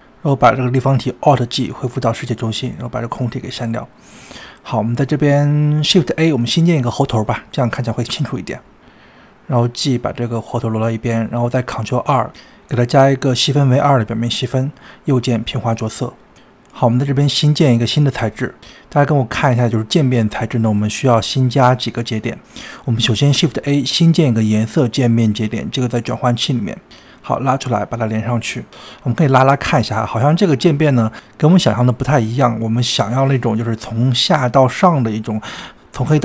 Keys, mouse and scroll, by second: 1.3 alt+g, 2.3 click, 2.7 x, 3.5 scroll down 2, 4.0-4.6 shift+middle drag, 4.6 scroll up 2, 5.1-6.6 middle drag, 6.7-7.8 shift+middle drag, 7.8 shift+a, 12.1 ctrl+2, 14.2 scroll down 2, 14.6-15.4 middle drag, 15.4 click, 15.6-16.5 right drag, 16.5-18.8 middle drag, 18.8 click, 19.6 scroll down 2, 20.3 shift+middle click, 20.8 scroll up 2, 21.9 click, 22.5 shift+a, 30.0 drag, 32.1-33.9 middle drag, 33.9 click, 35.4-35.8 drag.